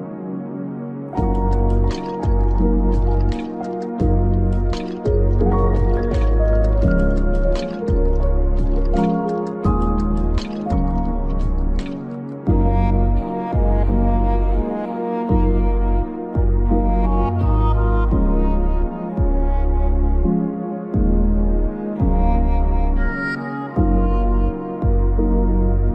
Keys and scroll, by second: 2.0 Up, 13.5 ctrl+v, 21.9 ctrl+v.